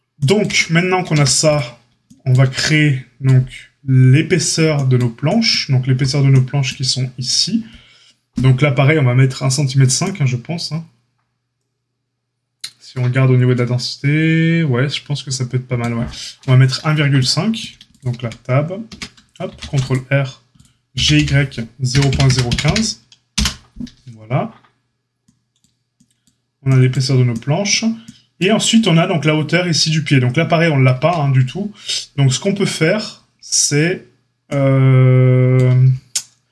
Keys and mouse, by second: 0.4 Tab, 1.1 a, 17.8 click, 18.1 Tab, 18.8 Tab, 19.4 ctrl+r, 20.9 g.